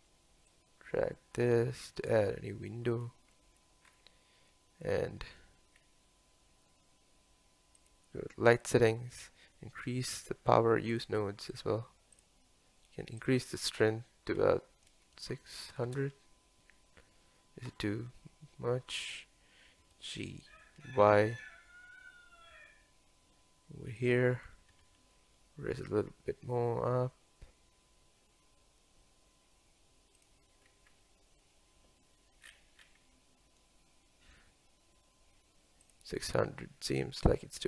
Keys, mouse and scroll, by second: 3.5-4.3 middle drag, 4.3-4.8 scroll down 2, 4.8-5.8 middle drag, 5.8 scroll up 1, 10.9 click, 12.3-16.0 drag, 16.0 KP_0, 19.9 g, 24.9 g, 32.6 scroll down 4, 33.0 scroll up 1.